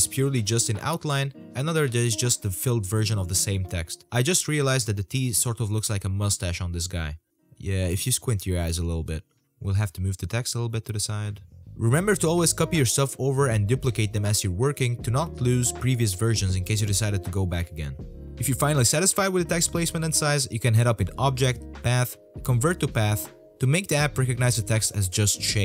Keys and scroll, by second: 12.7 Up.